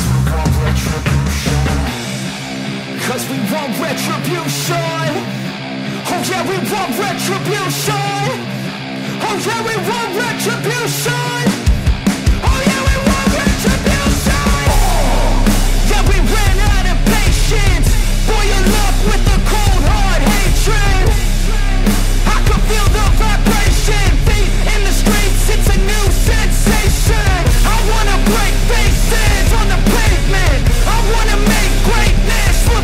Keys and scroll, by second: 20.0 ], 24.0 ctrl+-, 26.1 ], 27.0 ctrl+-, 27.2 ], 28.4 space, 28.6 ctrl+-, 28.7 space.